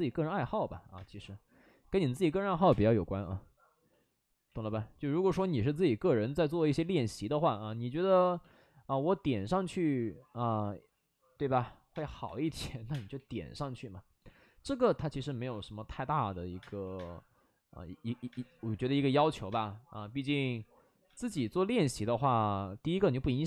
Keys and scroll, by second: 0.9 space, 2.5 5, 2.6 space, 4.5 ctrl+z, 5.3 ctrl+z, 6.5 2, 8.5 2, 8.9 ctrl+z, 11.9-13.1 typing, 16.1-16.9 typing, 18.2 space, 18.5 ctrl+z, 18.7 ctrl+z, 19.4 space, 21.0 space, 23.1 ctrl+z.